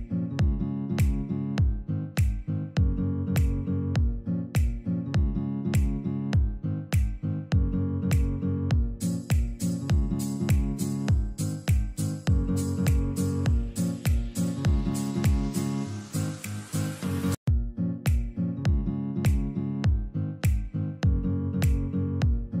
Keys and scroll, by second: 2.8 ctrl+Page_Down, 11.0 ctrl+r, 12.2 F3, 12.7 Escape, 21.3 Delete, 22.0 ctrl+z.